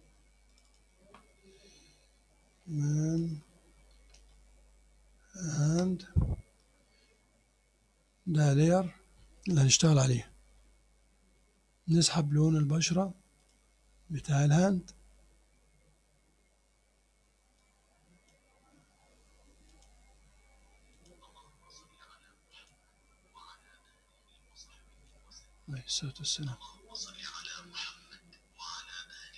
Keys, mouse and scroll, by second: 0.6 click, 2.2-5.0 typing, 5.7 Return, 13.4 click, 16.2 scroll up 1, 17.6 click, 19.7 click, 21.0 click, 22.6 click, 27.0 click, 28.1-28.8 scroll up 2, 29.0 middle click.